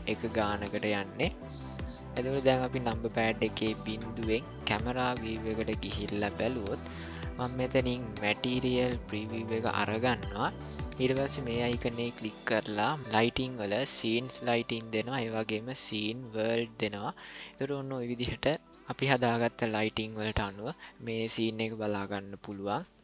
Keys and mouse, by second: 3.7 KP_0, 8.2 click, 11.3-16.7 drag.